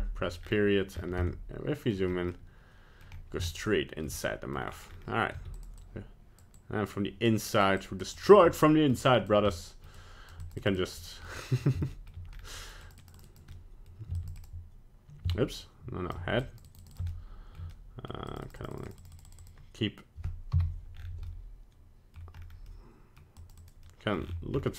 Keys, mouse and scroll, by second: 0.4 KP_Decimal, 1.2 scroll up 9, 2.0 middle click, 2.2 scroll up 1, 3.1 middle click, 3.5 scroll up 1, 4.1 shift+middle click, 4.6 middle click, 4.9 scroll down 3, 5.3 scroll up 2, 5.7 f, 8.4 click, 9.0 middle click, 9.5 click, 9.9 middle click, 11.2 click, 11.8 middle click, 12.3 shift+middle click, 12.5-12.9 scroll up 2, 13.5 click, 14.1 middle click, 14.3 shift+click, 15.3 click, 16.4 shift+click, 17.1 click, 17.7 shift+middle click, 18.2 middle click, 20.5 click, 20.9 KP_Decimal, 21.4 scroll down 4, 22.3 middle click, 22.7 scroll up 3, 23.3 middle click, 23.8 click, 24.1 middle click, 24.5 scroll down 6.